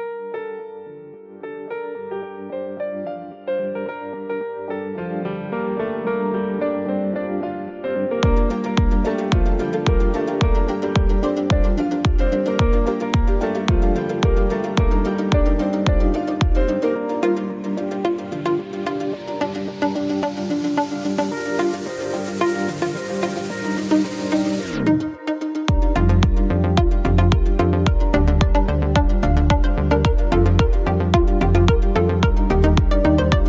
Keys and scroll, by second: 8.4 BackSpace, 10.8 BackSpace, 12.3 space, 32.7 ctrl+a.